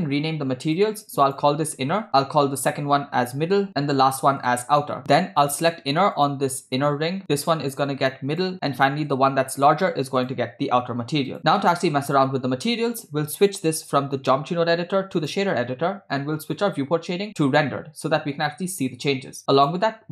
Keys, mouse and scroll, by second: 0.7 click, 1.3 click, 2.1 n, 2.6-3.7 drag, 3.7 d, 4.0 click, 4.4 click, 5.4 click, 7.4-8.5 drag, 8.5 middle click, 9.3 scroll down 1, 9.5 middle click, 10.2-11.4 drag, 11.6-12.7 middle drag, 13.7-15.5 drag, 17.6 click, 19.5 click.